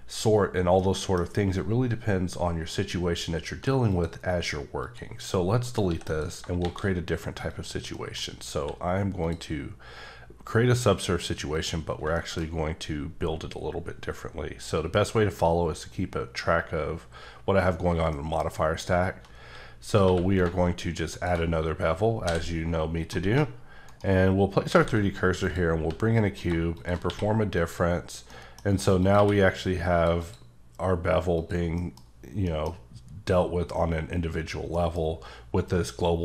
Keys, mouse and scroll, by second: 0.8 middle click, 3.9 click, 4.8 click, 5.4 middle click, 5.8 x, 5.9 x, 6.1 click, 6.6 shift+a, 7.5 click, 8.0 middle click, 8.5 q, 9.2 click, 9.9 scroll up 1, 11.5 click, 11.9 scroll down 3, 12.1 shift+middle click, 18.2 middle click, 20.0 q, 21.2 ctrl+shift+click, 22.2 x, 23.9 shift+right click, 24.7 shift+a, 25.4 click, 25.8 s, 26.4 click, 27.1 q, 27.5 click, 28.3 middle click, 28.7-29.0 scroll up 2, 29.0 click, 29.2 q, 29.6 click, 30.2 double click, 31.4 click, 31.8 middle click.